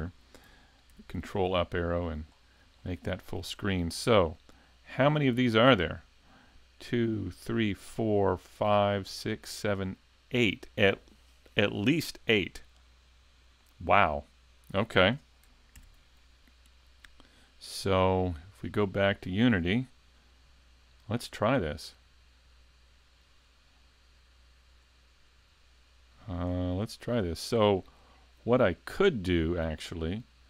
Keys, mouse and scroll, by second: 15.8 ctrl+Up.